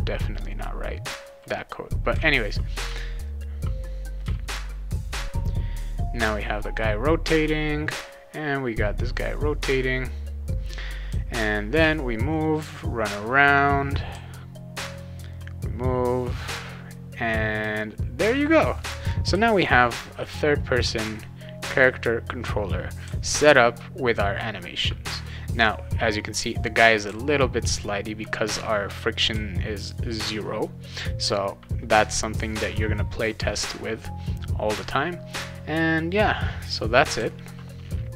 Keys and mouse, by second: 2.1 a, 2.8 a, 3.3 a, 4.2 a, 11.1 w, 14.1 d, 17.6 a, 19.3 d, 23.0 d, 27.1 d, 29.3 a, 37.2 shift+s.